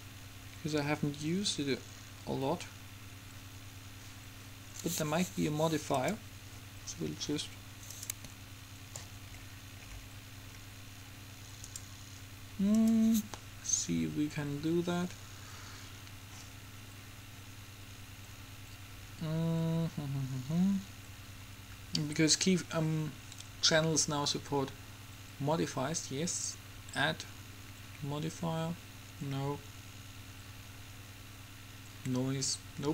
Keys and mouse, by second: 6.0 click, 7.0-10.0 middle drag, 11.8-13.0 drag, 13.0 middle click, 13.8-14.8 drag.